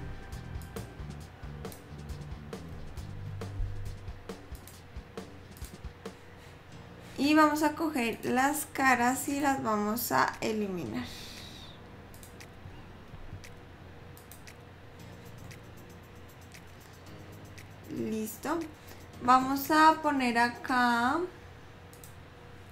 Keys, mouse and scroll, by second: 0.1 ctrl+r, 3.3 ctrl+r, 8.4 click, 9.5 click, 12.3 shift+click, 13.3 x, 15.8 middle click, 22.1 click.